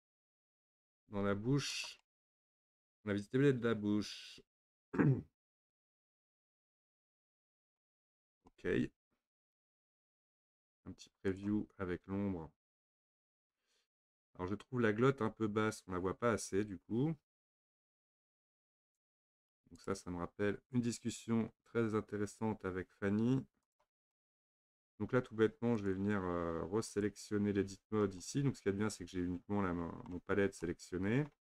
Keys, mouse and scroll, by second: 1.1 Tab, 1.7 click, 2.0-5.1 middle drag, 7.9 scroll down 1, 8.1-9.6 shift+middle drag, 9.6 scroll down 1, 9.7-10.1 shift+middle drag, 10.1-11.3 scroll down 1, 11.4 click, 13.7-14.3 scroll up 4, 18.9 click, 19.8 click, 23.7 click, 24.1-25.8 middle drag, 25.8 click, 26.9 click, 27.7 Tab, 28.2-30.3 middle drag, 30.3-30.7 scroll up 1, 30.7-31.4 middle drag.